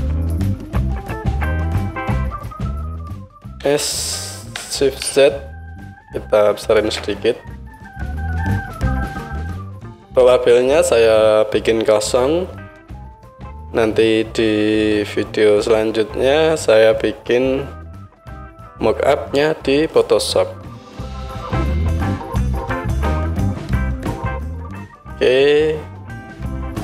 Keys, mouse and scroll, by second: 1.0-2.2 middle drag, 2.0 click, 2.0-5.0 right drag, 3.6 s, 5.0-6.6 middle drag, 6.6-7.0 shift+z, 6.6-9.2 right drag, 9.2 middle click, 9.3-26.8 right drag, 21.9 KP_1, 22.1 KP_1.